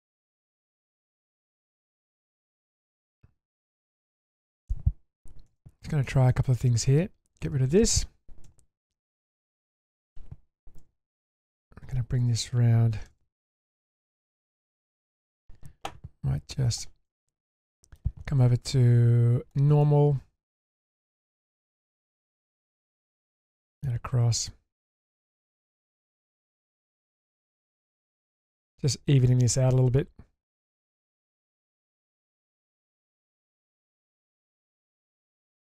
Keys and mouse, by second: 1.3 click, 1.9 alt+click, 2.9 click, 3.5 click, 4.0 ctrl+click, 5.5 ctrl+x, 5.8 middle click, 6.3 shift+middle drag, 8.4 ctrl+x, 8.8-9.9 middle drag, 10.8 1, 11.6 click, 13.1 g, 14.3 g, 16.7 click, 17.0 middle click, 18.8-19.5 drag, 19.8-20.5 middle drag, 21.2 click, 23.2 shift+middle click, 23.6 middle click, 24.3 click, 25.1 click, 26.6 click, 26.8 click, 28.3 click, 28.6 middle click, 29.4 click, 30.0 click, 31.8 click, 33.1 ctrl+z, 33.4-33.8 middle drag, 34.2 click, 34.9-35.7 middle drag.